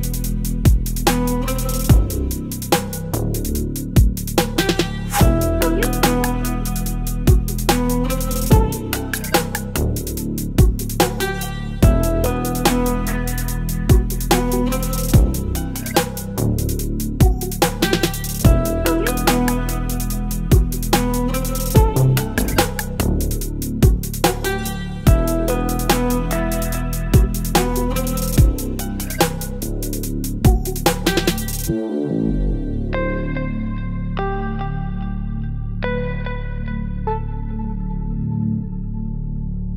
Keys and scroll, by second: 0.3 space, 2.3 Delete, 2.5 space, 2.8 v, 3.0 space, 6.2 ctrl+g, 10.2 space, 14.4 Return, 17.3 Down, 17.4 Down, 17.5 Return, 18.0 space, 21.5 Return, 21.7 space, 23.5 ctrl+t, 24.5 space, 26.6 Return, 26.9 ctrl+t, 27.9 Return, 28.0 space, 31.3 space, 33.7 Left, 33.7 Left, 33.8 Left, 33.8 Return, 34.0 space, 34.9 ctrl+t, 36.5 Return, 36.5 space, 37.9 space, 39.5 Delete.